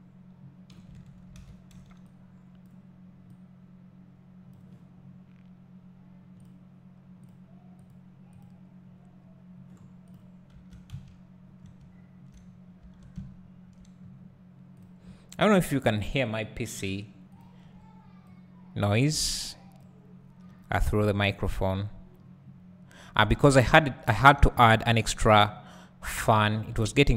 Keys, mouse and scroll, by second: 1.4 alt+a, 2.6 b, 10.5 Tab, 11.6 scroll down 1, 11.8 `, 12.5-12.8 scroll up 1, 12.8 Tab, 13.2 `, 14.0-14.8 scroll up 1, 14.8 click, 17.4 shift+click, 18.4-24.8 drag, 20.5 `.